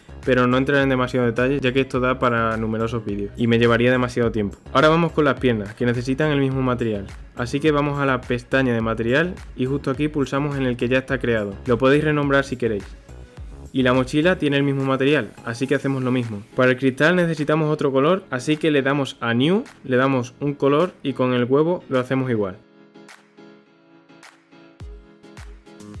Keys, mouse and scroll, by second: 3.4 scroll down 1, 3.6-4.4 middle drag, 4.4-4.8 scroll up 1, 4.8 shift+middle click, 5.7 click, 7.8 click, 9.0-12.0 drag, 12.1 click, 12.3-13.4 drag, 15.3 middle click, 15.4 click, 16.0 click, 16.4 scroll up 1, 16.6 click, 17.0-17.6 shift+middle drag, 17.6 click, 19.4 click, 22.1 drag, 22.3-23.0 drag, 23.4 click, 25.5 scroll up 1, 25.7-26.0 shift+middle drag.